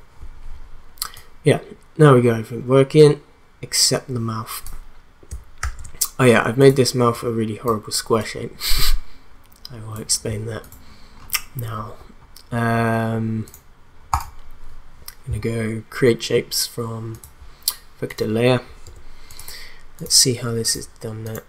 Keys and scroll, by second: 5.6 ctrl+s, 18.8 BackSpace.